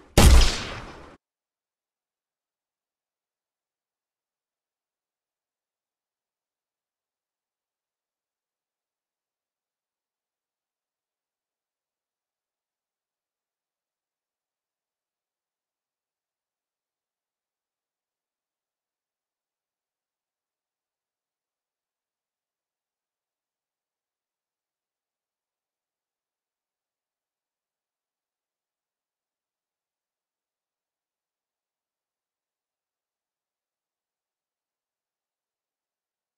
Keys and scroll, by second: 1.0 Escape, 2.3 w, 5.1 x, 35.0 w.